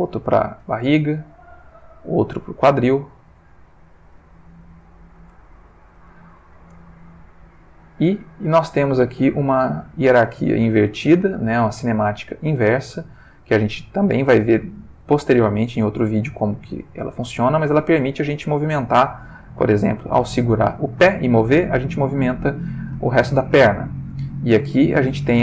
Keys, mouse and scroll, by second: 0.6 r, 1.5 click, 2.2 click, 3.0 r, 4.0 shift+click, 4.3 shift+middle click, 5.4-6.7 ctrl+shift+middle drag, 6.9 ctrl+shift+middle click, 7.7 click, 8.4 g, 10.1 click, 11.4 click, 12.2 g, 13.1 Escape, 13.3 click, 14.2 g, 22.3 click, 23.3 shift+middle click, 24.3 click, 25.1 r.